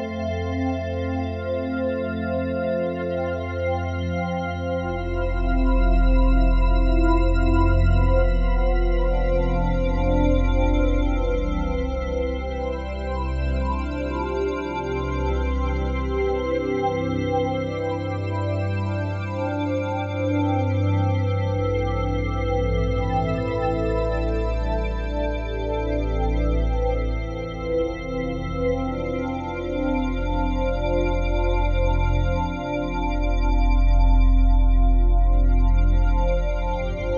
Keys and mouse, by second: 1.6-5.1 drag, 5.9-10.0 drag, 12.0 ctrl+z, 13.6 f, 14.4 click, 15.3-16.6 drag, 17.9-25.2 drag, 25.6 ctrl+z, 27.0-30.1 drag, 32.6 click, 33.4-34.8 drag.